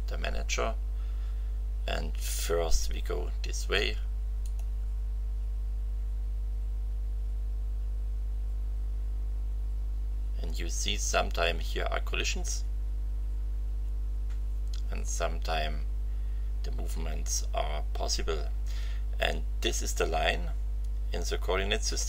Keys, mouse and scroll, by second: 4.4 click.